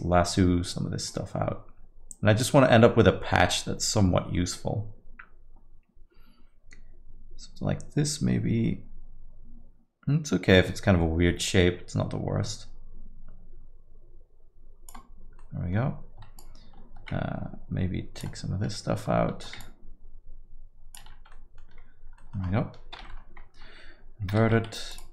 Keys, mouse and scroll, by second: 1.1 click, 15.4 middle click, 16.3 shift+click, 19.6 ctrl+click, 21.3 middle click, 22.2 middle click, 23.1 ctrl+i, 24.3 x.